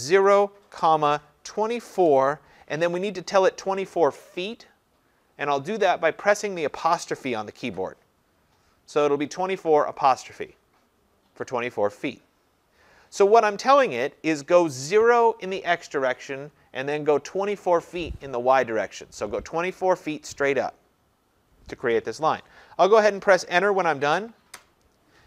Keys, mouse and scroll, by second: 0.2-2.1 typing, 24.6 Return.